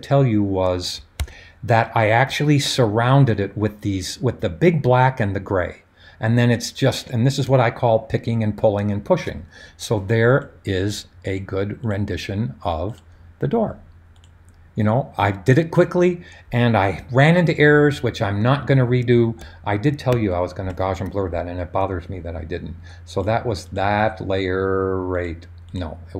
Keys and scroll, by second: 1.2 super+d.